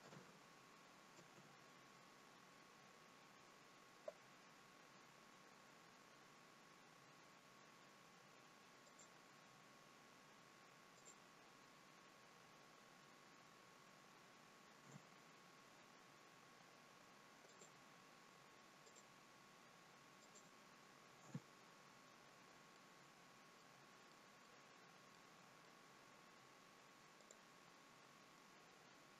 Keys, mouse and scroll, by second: 4.9 k, 16.0-16.9 scroll up 4, 16.9 k, 22.2-22.8 scroll down 3, 22.8 middle click, 24.0 middle click, 25.2 middle click, 25.2-26.1 scroll up 2, 27.1 click.